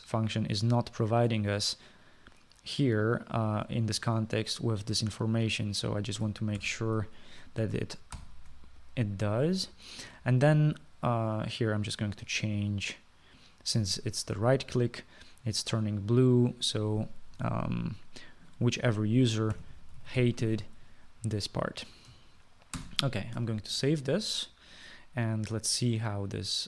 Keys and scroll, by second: 7.7 ctrl+c, 9.2 ctrl+v, 20.4-21.8 typing, 23.8 ctrl+s.